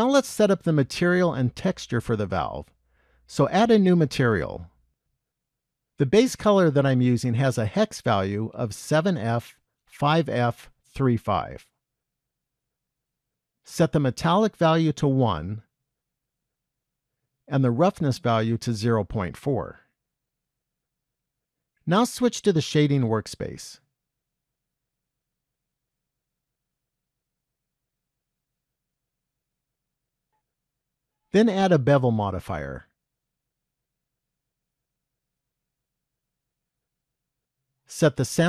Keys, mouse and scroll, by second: 3.1 click, 4.3 click, 6.6 click, 14.9 click, 17.3-19.1 scroll down 4, 19.1 click.